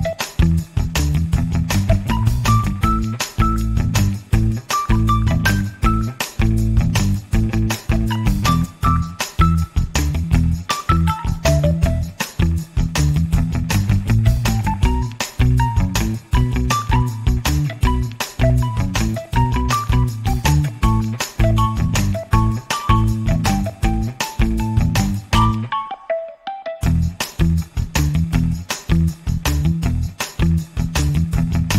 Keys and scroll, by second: 24.8 2, 25.2 4, 26.6 *, 27.8 4, 28.5 Return.